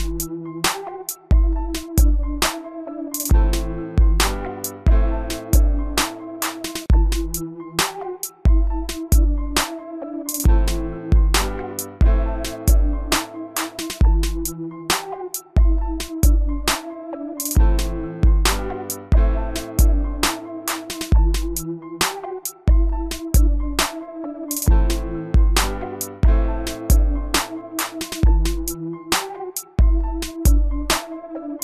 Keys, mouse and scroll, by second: 4.4-5.3 typing, 7.2 click, 8.5 middle click, 10.3 click, 15.5 typing, 16.1 Return, 17.7 click, 31.4 middle click.